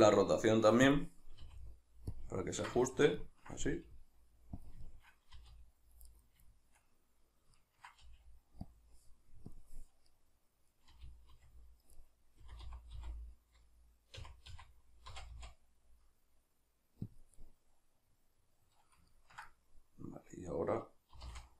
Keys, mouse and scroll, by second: 1.4 click, 1.4 g, 2.4-4.7 ctrl+middle drag, 3.6 g, 4.7 click, 4.8-6.2 shift+middle drag, 5.4 r, 6.2 right click, 6.5-8.8 shift+middle drag, 8.0 g, 8.8 click, 10.1-12.1 middle drag, 10.9 r, 12.1 right click, 12.5 r, 17.2 click, 17.4-21.5 middle drag, 21.1 r.